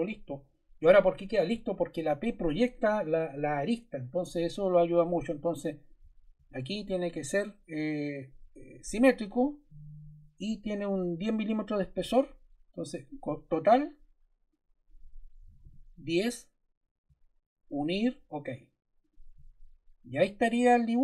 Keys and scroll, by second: 15.1-16.0 typing.